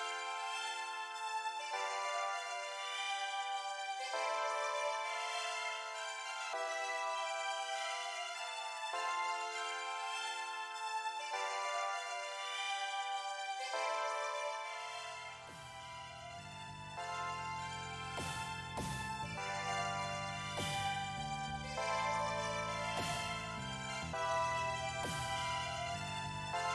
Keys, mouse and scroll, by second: 5.1 click, 7.5 click.